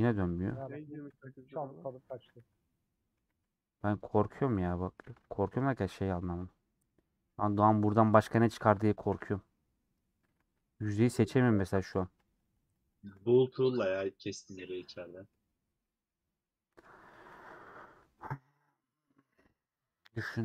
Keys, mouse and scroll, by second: 0.3 alt+click, 0.8 middle click, 1.1 a, 2.0 alt+z, 2.6 middle click, 3.2 alt+z, 3.5 middle click, 4.4 alt+z, 4.6 middle click, 5.0 alt+z, 5.1 middle click, 5.6 3, 6.5 alt+Left, 6.8-8.0 middle drag, 8.0 scroll down 1, 9.0 alt+Left, 9.5 middle click, 10.3 alt+z, 10.7 middle click, 11.2 alt+z, 12.1-13.7 alt+drag, 13.8 scroll down 1, 13.9 middle click, 14.6 scroll down 1, 14.7 middle click, 15.5 scroll down 3, 15.7-17.6 middle drag, 17.6 /, 18.1 middle click, 18.5 Tab, 18.6 scroll up 1, 18.6 scroll down 1, 18.7-19.3 scroll up 2, 18.9 click, 19.3 middle click, 19.8 scroll up 1, 20.0 middle click.